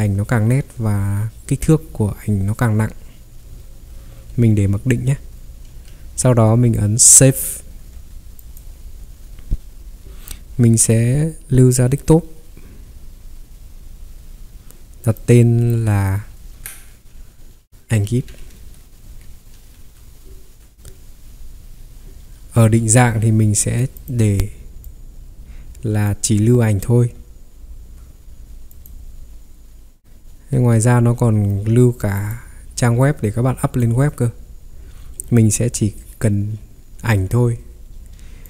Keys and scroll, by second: 3.4 Escape, 3.5 Escape, 5.7 ctrl+3, 7.7 Escape, 17.8-20.2 typing, 22.6 ctrl+3, 27.8 Escape, 28.1 ctrl+3, 28.1 typing, 30.6 ctrl+3.